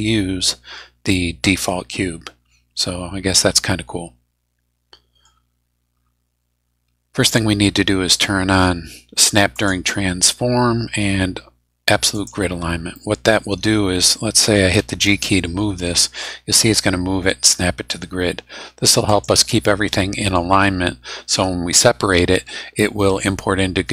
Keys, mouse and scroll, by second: 5.8 scroll up 1, 9.5 click, 12.1 click, 12.9 middle click, 14.8 g, 19.0 click, 19.6 middle click.